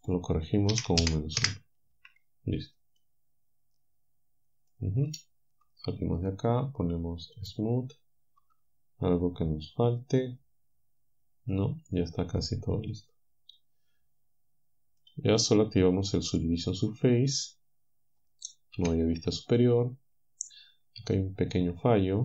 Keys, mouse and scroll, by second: 0.7 -, 1.1 1, 1.4 Return, 1.9 a, 3.0-5.4 drag, 5.4 Tab, 7.4 click, 8.4 Tab, 12.4-15.2 drag, 16.3 click, 18.8 7, 20.5-22.2 drag.